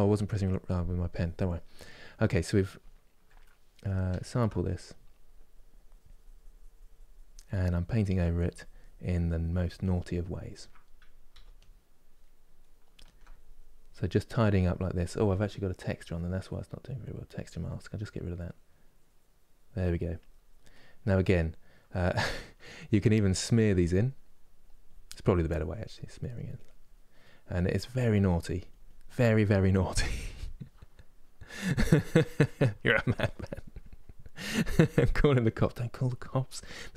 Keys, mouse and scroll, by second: 2.5-4.0 ctrl+middle drag, 4.3-11.0 drag, 11.0 f, 11.9 middle click, 12.7-15.0 ctrl+drag, 15.0-18.0 middle drag, 18.0-20.4 drag, 20.4-22.8 middle drag, 22.8-26.9 drag, 26.9 middle click, 27.4-36.9 drag.